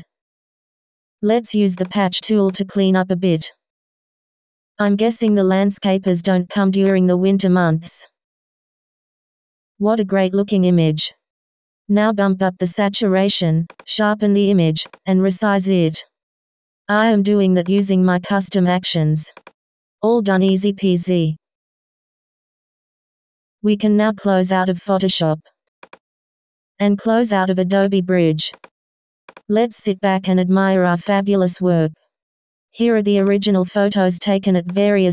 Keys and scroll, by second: 21.0 k.